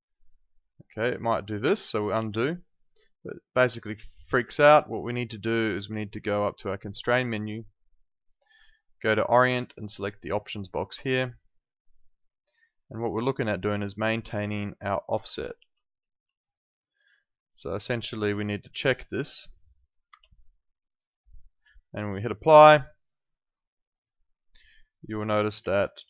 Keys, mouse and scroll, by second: 2.1 ctrl+z, 7.4 click, 10.4 click, 15.5 ctrl+2, 20.1 `, 20.9 click, 25.7 alt+right click.